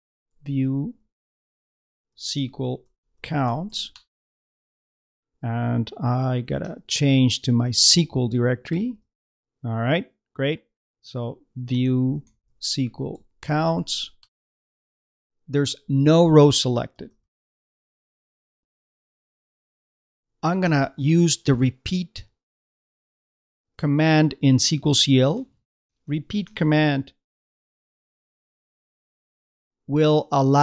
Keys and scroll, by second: 0.0-3.3 typing, 11.2-13.7 typing.